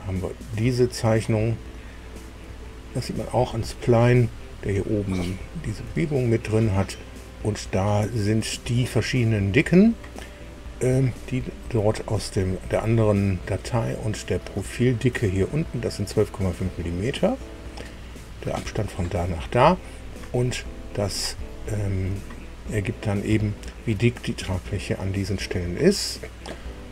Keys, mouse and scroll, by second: 0.6 scroll up 1, 2.5 shift+middle click, 3.4-3.8 shift+scroll up 2, 5.0-5.6 scroll down 2, 5.9 shift+middle click, 7.8-8.6 scroll up 2, 10.4-10.8 scroll down 2, 11.0 shift+middle click, 12.2-12.8 shift+scroll up 4, 14.2 scroll down 1, 14.6 shift+middle click, 15.5 shift+middle click, 16.8-17.2 scroll up 1, 17.4 scroll up 1, 19.9-20.4 scroll down 1, 21.0-21.3 scroll down 1, 21.4 shift+middle click, 22.5-22.9 scroll up 1, 23.3 shift+middle click.